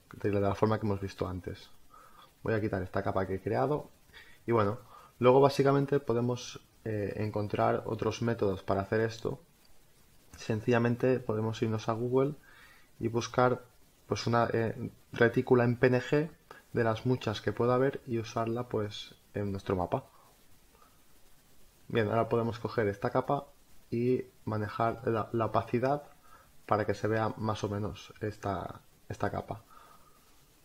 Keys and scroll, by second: 21.6 space.